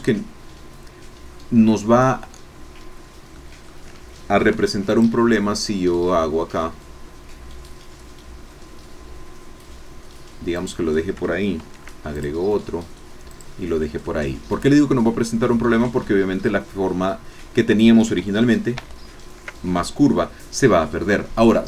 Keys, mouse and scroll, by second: 3.3 click, 4.4 ctrl+r, 4.9 ctrl+click, 10.7 click, 11.6 ctrl+r, 12.2 ctrl+click, 13.4 click, 14.0-15.8 drag, 16.1 shift+click, 18.2 ctrl+z.